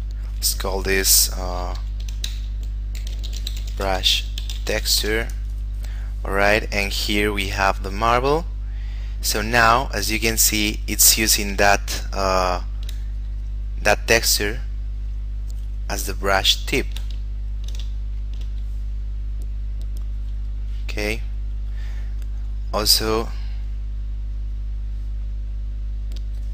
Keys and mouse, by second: 2.5-5.4 typing, 9.1 click, 12.1 shift+middle click, 13.4 click, 16.8 shift+middle click, 17.5 ctrl+middle click, 18.2 shift+middle click, 21.5 click, 26.4 click.